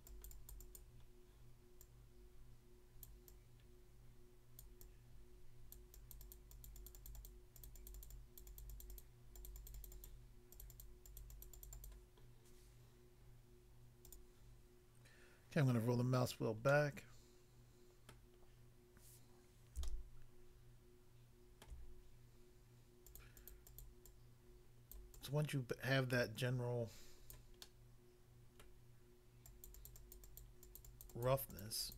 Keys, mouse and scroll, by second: 1.0 scroll down 1, 1.9 click, 3.1 click, 3.3 click, 4.5 click, 4.6 click, 4.8 click, 5.8 click, 6.1 click, 6.7 click, 7.1 click, 7.7 double click, 7.9 double click, 8.0 double click, 8.5 double click, 8.7 double click, 8.7 double click, 8.9 double click, 8.9 click, 9.1 click, 9.4 click, 9.5 click, 9.9 double click, 10.1 double click, 10.5 double click, 10.6 double click, 10.7 double click, 10.8 double click, 11.1 double click, 11.2 double click, 11.3 double click, 11.7 double click, 11.7 double click, 11.8 double click, 14.1 click, 14.2 click, 15.6 scroll down 1, 16.7 middle click, 18.1 middle click, 18.4 scroll up 1, 19.8 shift+middle click, 23.1 click, 23.2 click, 23.4 click, 23.5 double click, 23.6 double click, 23.9 double click, 24.1 double click, 24.9 click, 25.1 click, 27.3 click, 27.7 middle click, 28.7 middle click, 29.4 click, 29.7 click, 29.8 click, 29.9 click, 30.2 click, 30.4 click, 30.6 click, 31.1 double click, 31.3 double click, 31.6 double click, 31.7 double click, 31.9 double click.